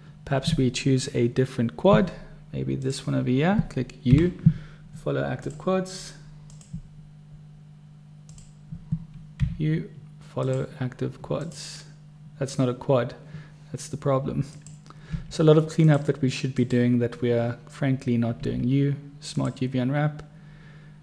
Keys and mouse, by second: 3.0 click, 4.3 u, 8.6 click, 9.7 u, 14.8 click, 15.5 u, 18.7 u.